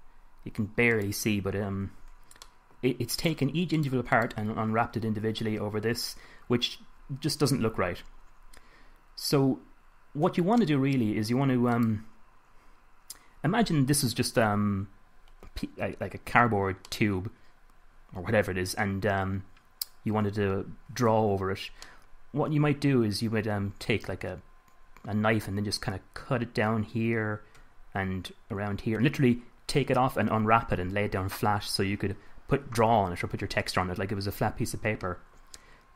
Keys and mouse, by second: 3.5-6.2 middle drag, 12.1-16.2 middle drag, 16.8-20.8 middle drag, 22.2 middle click.